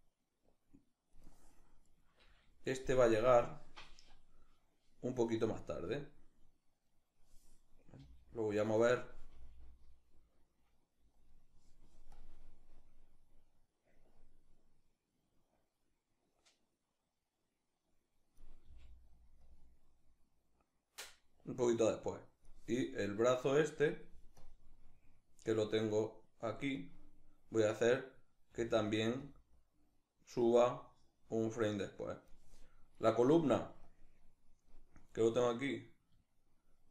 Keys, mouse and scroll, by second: 1.5-5.6 right drag, 6.6-7.6 right drag, 7.6 g, 8.3 right click, 9.0 g, 10.9 click, 11.8-18.9 drag, 19.1-23.0 drag, 23.0 right click, 24.0-26.4 drag, 26.4-28.1 right drag, 28.1 g, 29.3-32.6 drag, 32.6 right click, 33.5-34.8 drag, 34.8 right click, 35.3-36.9 drag.